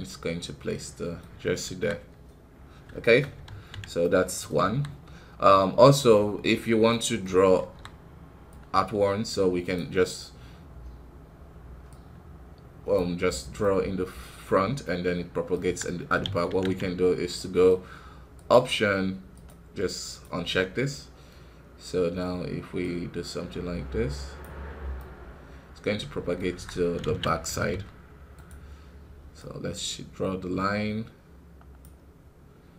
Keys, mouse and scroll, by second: 1.6 KP_1, 2.3-2.9 scroll up 1, 2.9 shift+middle click, 3.4 ctrl+z, 3.9 middle click, 4.6 KP_1, 6.8 middle click, 7.5 KP_1, 9.7-13.5 drag, 13.5-15.6 middle drag, 15.6 KP_1, 16.2 ctrl+z, 16.4 ctrl+z, 24.3 click, 24.9-26.3 middle drag, 26.3 scroll up 1, 26.4 KP_1, 27.0 ctrl+z, 27.4 f, 31.9-32.7 drag.